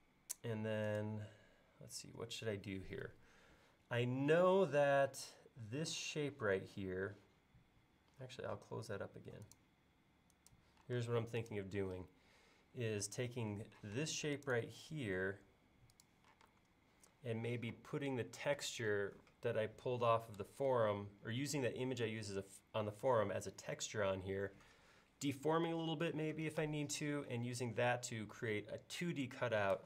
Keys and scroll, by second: 8.2 l, 11.0 space, 13.9 m, 16.4 space.